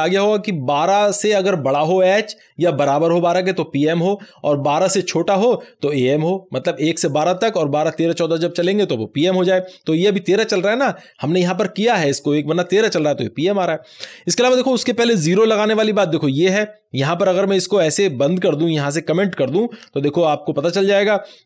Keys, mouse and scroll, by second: 16.2 click, 16.2-17.2 scroll down 1, 17.2-20.1 drag, 20.1 alt+shift+a.